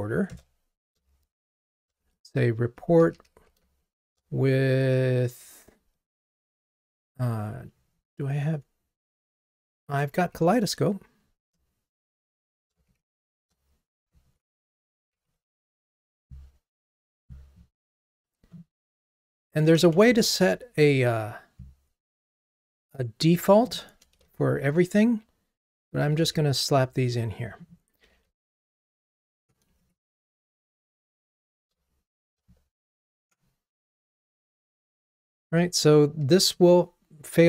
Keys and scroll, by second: 12.1 Return, 15.5 alt+Up, 24.2 super+c, 26.2 super+v, 36.2 r.